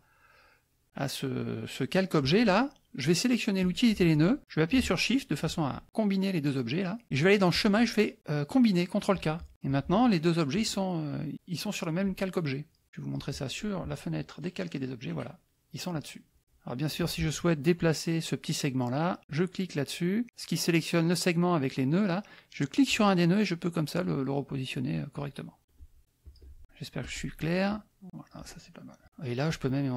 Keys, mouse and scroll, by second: 3.6 click, 5.4 shift+click, 7.5 click, 9.2 click, 9.6 click, 10.5-12.0 drag, 12.8 click, 15.9 click, 17.0 click, 19.2 click, 22.8-25.4 drag, 26.2 click, 27.0 click, 27.6 click, 29.0 KP_Subtract, 29.0 middle click, 29.4-29.9 drag.